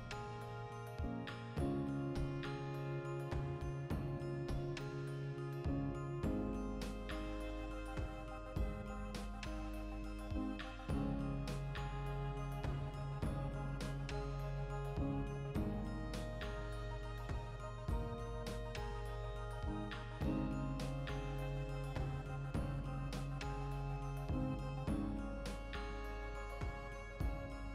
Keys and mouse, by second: 1.2 1, 1.3 right click, 1.5-4.3 ctrl+middle drag, 3.3 alt+q, 4.1 2, 4.3 right click, 5.2-6.4 shift+middle drag, 5.7 e, 6.4 click, 6.7 s, 7.0 click, 7.7 click, 8.9 g, 9.4 click, 9.5 right click, 9.9 f, 10.1-11.4 ctrl+shift+middle drag, 11.2 1, 11.4 right click, 11.6-13.1 ctrl+middle drag, 12.7 e, 13.1 click, 13.2 shift+right click, 13.6 f, 14.1 2, 14.2 right click, 14.6 f, 15.2-16.6 ctrl+middle drag, 16.6 right click, 16.9 ctrl+middle click, 17.2 ctrl+right click, 17.6 e, 18.2 click, 18.4-22.6 ctrl+shift+middle drag, 18.9 ctrl+r, 22.6 right click, 22.7 ctrl+z, 23.0 ctrl+r, 23.7 click, 23.8 right click, 24.5 ctrl+z, 25.0 ctrl+r, 26.4 shift+right click, 26.8 f, 27.0 right click, 27.2 f.